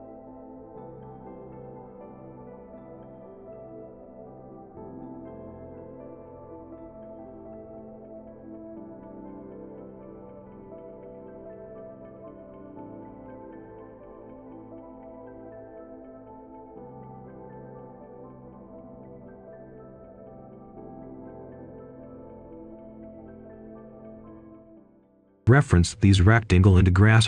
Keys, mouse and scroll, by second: 1.1-2.2 scroll up 1, 2.2 click, 2.5 right click, 4.3 click, 4.7 right click, 5.2 scroll down 1, 5.3 right click, 5.8 scroll up 1, 5.9 click, 6.0 right click, 6.2 click, 6.3 right click, 6.3 scroll down 1, 6.4 scroll up 1, 6.6 click, 6.7 right click, 6.8 click, 6.9 right click, 7.0 scroll down 1, 7.1 right click, 7.2 scroll up 1, 7.4 click, 7.8 right click, 7.9 click, 8.2 right click, 8.5 click, 8.6 right click, 8.7 scroll down 1, 8.8 scroll up 1, 8.9 click, 9.0 scroll down 1, 9.3 right click, 10.8 click, 11.5-12.3 typing, 12.5 Return, 13.6 right click, 14.0 shift+right click, 14.7 click, 15.8-16.9 typing, 17.7 click, 18.2 right click, 19.4 shift+right click, 20.0 right click, 20.5-20.8 scroll down 1, 20.8 right click, 21.4 click, 21.5 Escape, 21.9 click, 22.2-23.3 typing, 25.0 click, 25.6 shift+click, 26.3 shift+click, 27.1 shift+click.